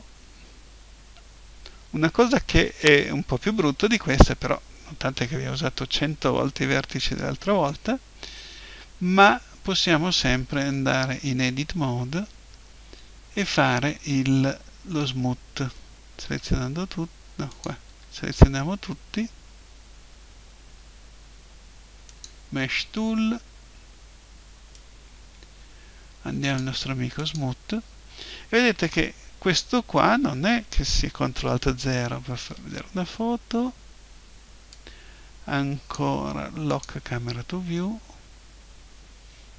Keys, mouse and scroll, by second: 10.5 Tab, 16.2 a, 17.5-19.1 drag, 17.9 a, 21.1-22.1 middle drag, 22.1-24.0 drag, 24.7-26.7 drag, 27.1-29.1 drag, 29.1-31.7 middle drag, 31.7 ctrl+alt+KP_0, 34.7-36.5 drag, 36.5 middle click, 36.7-38.5 drag.